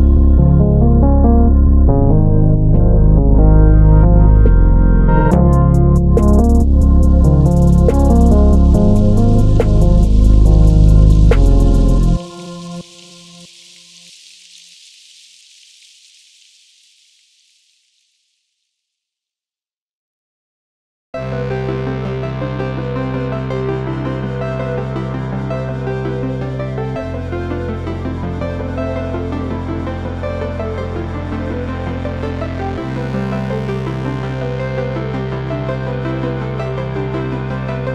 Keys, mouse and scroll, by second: 1.4 click, 1.6-9.1 middle drag, 2.0 KP_Decimal, 2.3 scroll down 1, 3.0 shift+z, 5.6 g, 9.1 click, 9.4 s, 11.0 click, 11.4 g, 12.8 click, 13.0-14.3 middle drag, 14.3 scroll up 2, 14.4 middle click, 14.9 click, 15.4 Tab, 16.4 3, 16.6 click, 17.3 e, 19.3 click, 20.4-20.8 scroll down 1, 20.9 Tab, 21.1 click, 21.3-24.9 middle drag, 22.8-23.6 scroll down 1, 24.9 shift+right click, 25.0 middle click, 25.7 shift+right click, 25.8-29.4 middle drag, 26.9-27.3 scroll up 1, 27.8-28.6 scroll up 1, 28.6 shift+a, 29.4 click, 29.7 Tab, 30.4 click, 30.7 shift+a, 32.4 r, 33.8 Return, 34.2 s, 35.2 click, 35.5 g, 36.6 click, 36.8 KP_3, 37.3 KP_4, 37.7 KP_1.